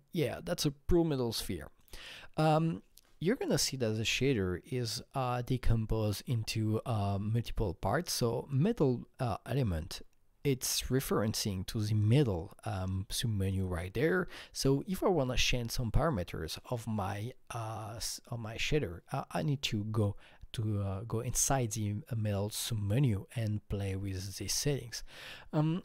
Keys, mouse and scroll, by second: 1.8-5.9 drag, 9.9 click, 9.9-10.7 scroll down 5, 10.9-12.1 scroll down 1, 13.4 click, 13.4 scroll down 1.